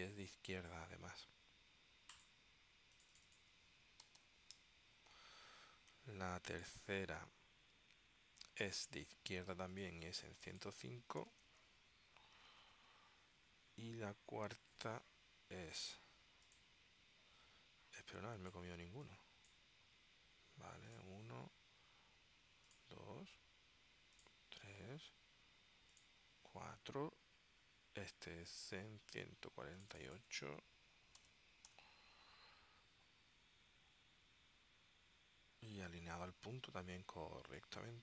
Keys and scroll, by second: 4.2 6, 4.6 Tab, 10.9-12.1 typing, 13.0 Tab, 30.7 1, 31.3 4, 31.8 8, 35.3 Tab.